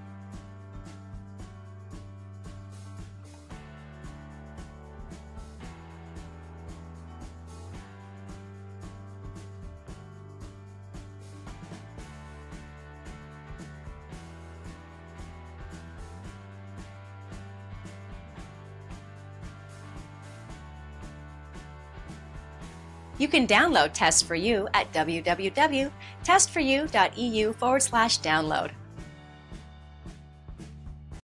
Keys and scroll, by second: 14.8 Return.